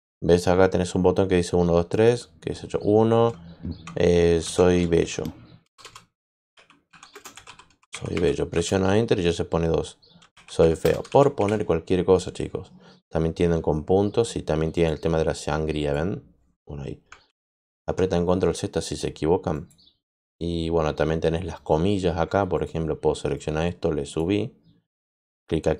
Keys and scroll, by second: 4.1-8.6 typing, 9.9-11.8 typing, 17.2 ctrl+z, 17.6 ctrl+z.